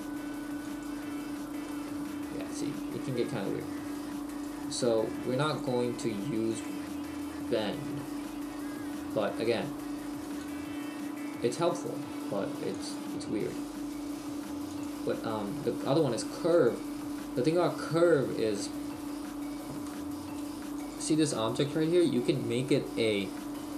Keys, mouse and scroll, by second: 1.7 middle click, 4.3 click, 10.4 click, 12.8 click, 14.8 click, 20.9 click.